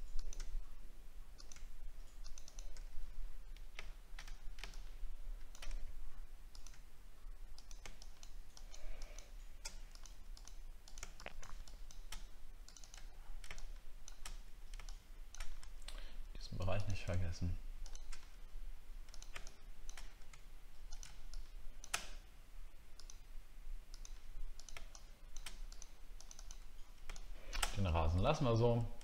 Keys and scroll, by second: 4.3-4.9 alt+scroll down 5, 13.1 alt+scroll down 1, 28.3 alt+scroll up 1.